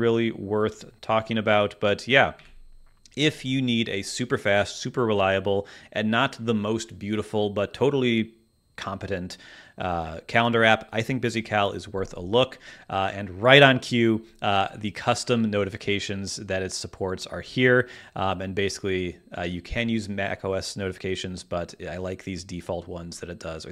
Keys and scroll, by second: 2.3 super+w.